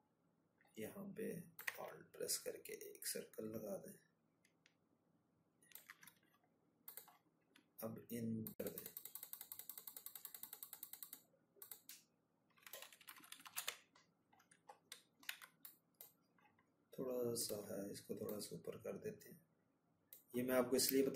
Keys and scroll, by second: 10.7 ctrl+-, 10.9 ctrl+-.